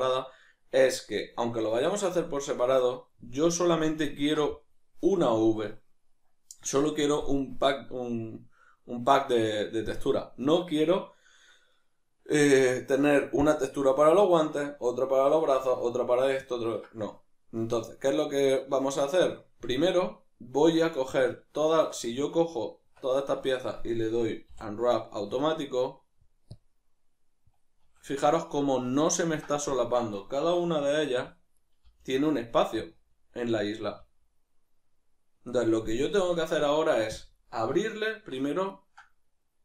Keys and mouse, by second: 4.0-14.9 ctrl+middle drag, 14.9-20.5 drag, 21.6 shift+right click, 22.8 Tab, 28.7-30.1 ctrl+middle drag, 30.1-38.7 right drag, 38.7-39.6 ctrl+middle drag.